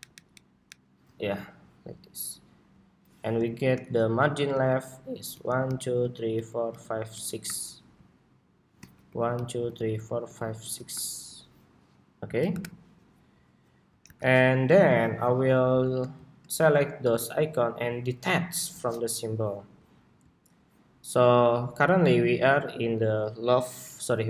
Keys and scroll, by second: 0.7 alt+Down, 1.3 alt+Down, 3.0 alt+Down, 15.1 super+-.